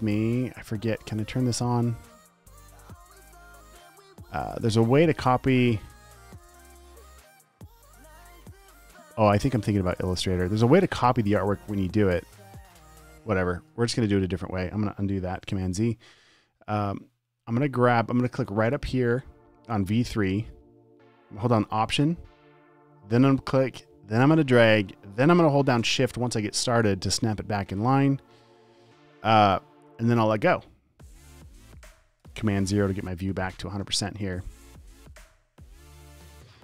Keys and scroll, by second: 15.8 super+z, 32.6 super+0, 36.5-36.6 typing.